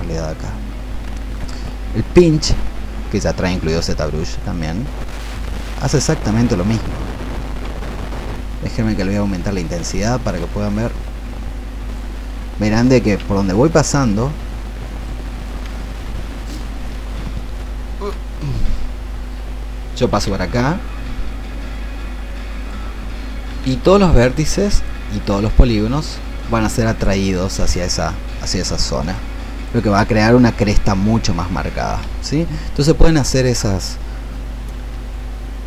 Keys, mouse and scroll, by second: 10.6-20.5 drag.